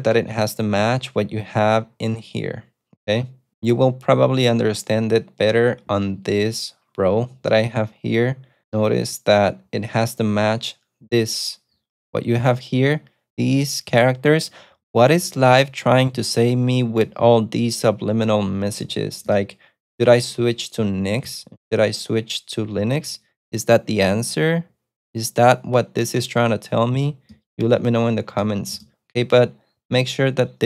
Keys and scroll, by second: 0.9 ctrl+super+F2.